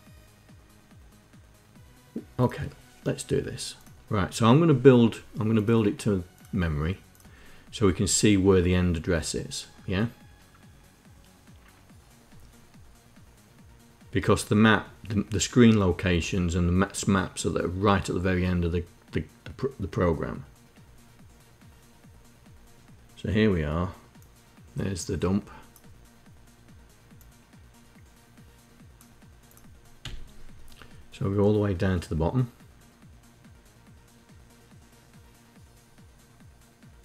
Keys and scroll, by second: 29.7 Page_Down.